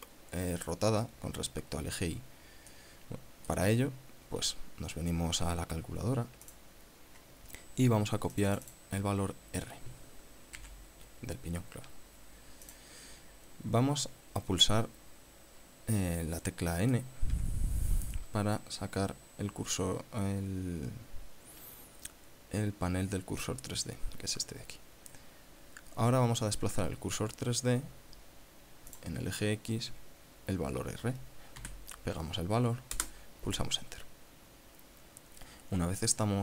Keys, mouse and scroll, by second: 3.2 click, 7.0 click, 8.8 click, 11.0 ctrl+c, 13.2 click, 16.6 click, 17.8 n, 29.4 click, 32.0 ctrl+v, 33.4 Return.